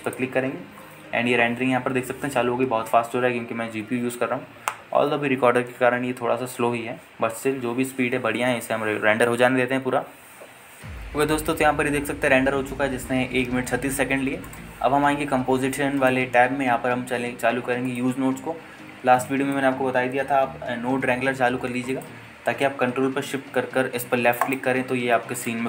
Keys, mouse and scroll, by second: 0.5-3.4 drag.